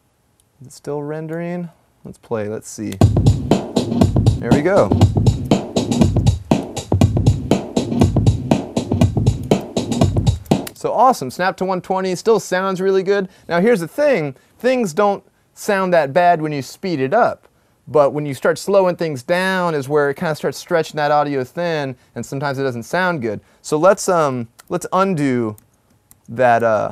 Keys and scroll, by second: 5.5 super+=, 24.5 t, 25.1 super+z, 25.7 super+z, 26.4-26.8 typing.